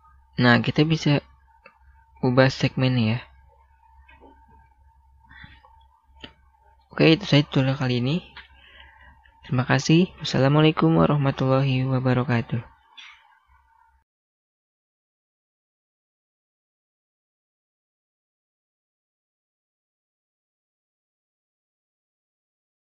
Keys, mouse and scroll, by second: 5.7 middle click.